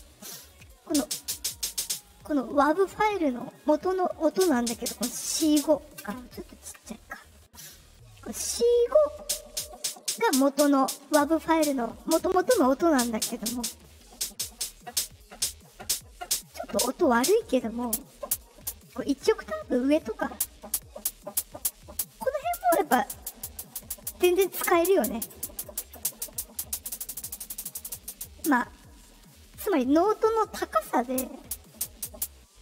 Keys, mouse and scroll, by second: 0.3 click, 1.3 click, 1.5 click, 1.6 click, 1.7 click, 3.2 click, 6.5-7.8 ctrl+middle drag, 6.5-7.3 ctrl+scroll up 1.